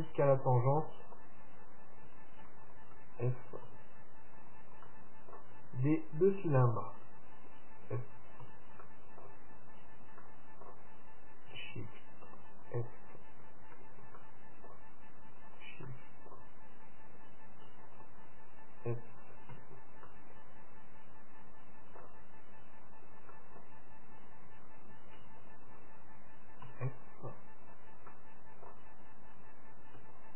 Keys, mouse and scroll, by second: 0.4-2.0 right drag, 1.0-2.8 middle drag, 2.9-6.6 right drag, 3.8 f, 5.0-7.0 middle drag, 7.0-8.9 right drag, 8.7 f, 9.0-12.2 middle drag, 10.0-11.7 right drag, 12.8-14.5 right drag, 13.9 f, 14.4-17.9 middle drag, 15.7-17.4 right drag, 18.1-20.0 right drag, 19.8 f, 20.2-22.2 middle drag, 23.1-24.9 right drag, 23.5-25.5 middle drag, 25.6-27.4 right drag, 26.8 f, 27.8-29.4 right drag, 28.3-30.1 middle drag, 30.1 middle click.